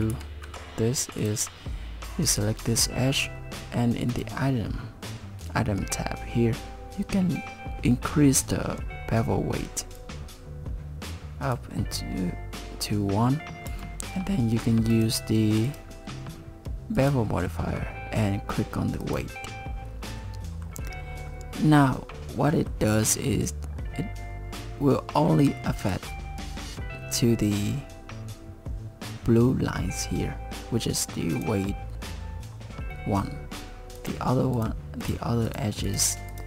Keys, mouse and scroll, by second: 0.1 ctrl+z, 1.2 click, 4.1 click, 10.0 click, 13.7 Tab, 14.9 click, 15.7 click, 19.0 click, 20.1 middle click, 22.5 middle click, 23.1 middle click, 25.9 Tab, 31.3 click, 34.0 click, 34.5 click, 35.0 click, 35.5 click, 35.9 click, 36.3 click.